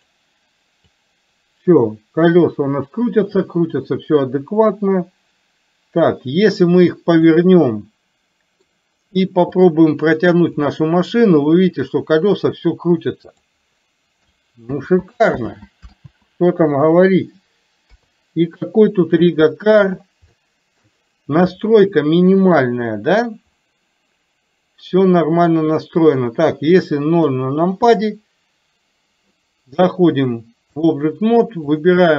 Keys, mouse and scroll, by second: 1.1-7.3 drag, 7.6-8.6 middle drag, 9.6 click, 10.7-13.5 drag, 15.5 ctrl+z, 18.0 KP_3, 19.5 shift+middle click, 20.5 shift+middle click, 21.6-22.7 middle drag, 27.3 KP_0, 30.2 click, 31.8 drag.